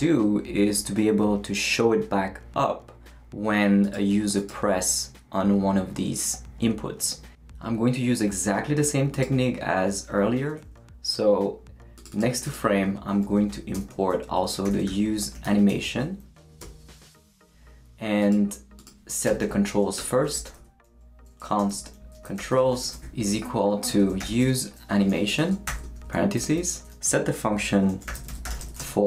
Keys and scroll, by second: 13.5-16.2 typing, 16.2 Down, 16.6 Return, 19.3 Return, 19.7 Up, 20.0 Tab, 20.1-25.7 typing, 25.1 Return, 26.4 shift+Return, 27.6-29.0 typing.